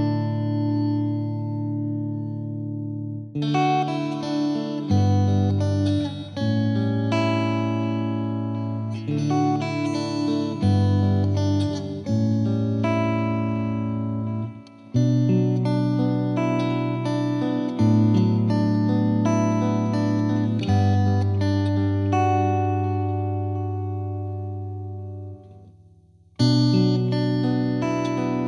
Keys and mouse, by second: 2.7 click, 3.5 click, 5.0 click, 6.0 click, 8.0 click, 9.2-10.3 drag, 10.7-11.8 drag, 13.7 click, 14.7 ctrl+z, 16.6 click, 17.0 click, 18.5 click, 20.7 click, 23.2 click, 24.6 click, 27.9-28.4 drag.